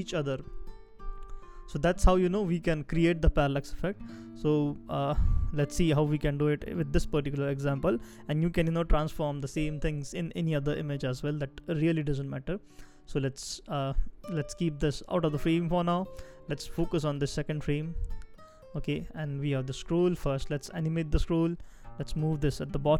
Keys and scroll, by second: 21.1-21.6 shift+scroll down 1.